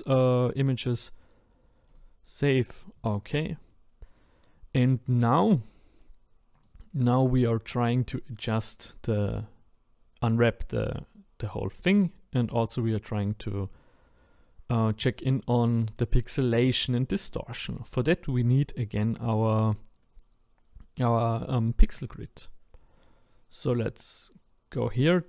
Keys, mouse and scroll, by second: 6.0-6.6 scroll up 1, 6.6 click, 15.0-25.2 middle drag.